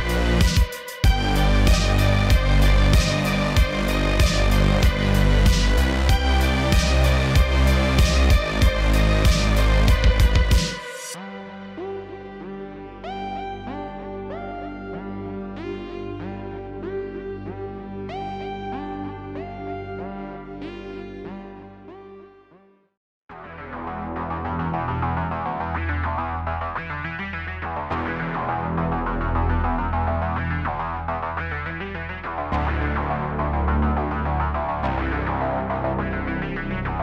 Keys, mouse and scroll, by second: 0.7 click, 2.1 ctrl+g, 2.5 Tab, 3.0 click, 3.4 click, 4.0 click, 4.3-7.0 middle drag, 8.3 click, 9.1 click, 9.3 x, 10.0 drag, 11.2 click, 11.4 scroll down 3, 11.6-12.3 middle drag, 12.3-12.7 scroll up 6, 12.7 middle click, 13.4 click, 13.9 click, 14.5 click, 15.9 click, 16.8 click, 17.7-19.2 drag, 19.4-19.8 middle drag, 19.8 scroll up 4, 20.2-21.0 shift+middle drag, 21.0 click, 21.8-24.0 middle drag, 24.0-27.2 drag, 31.2-32.7 drag, 33.2 click, 33.5-34.6 drag, 34.6 KP_1.